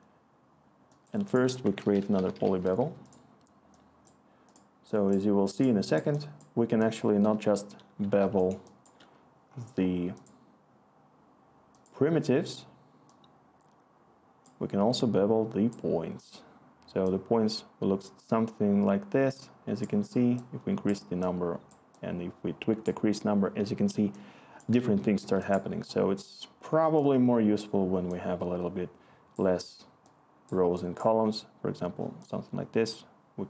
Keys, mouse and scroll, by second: 1.5 Tab, 1.7-2.8 typing, 8.0-8.8 click, 8.5 click, 14.0 click, 23.9-24.6 click, 24.4 click.